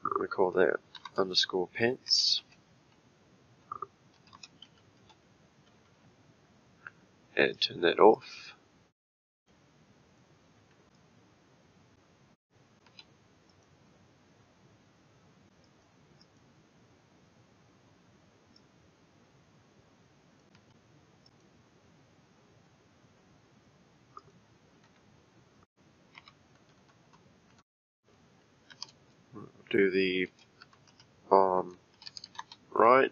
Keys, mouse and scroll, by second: 7.5 click, 8.1 click, 9.5 middle click, 10.3-10.8 scroll down 3, 10.9 click, 12.8 p, 15.6 click, 16.2 click, 18.5 click, 20.5 p, 24.2 click, 24.8 F2, 26.8 BackSpace.